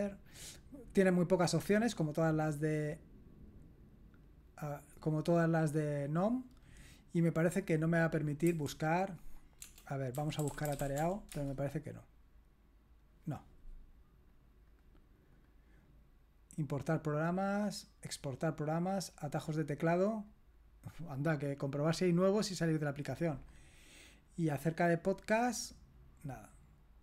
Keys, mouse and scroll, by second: 0.3 click, 1.5 click, 4.2 click, 7.2 click, 8.4 g, 9.9-11.5 typing, 14.3-15.5 drag, 19.4 click, 22.8 click, 23.4 click, 24.5 click.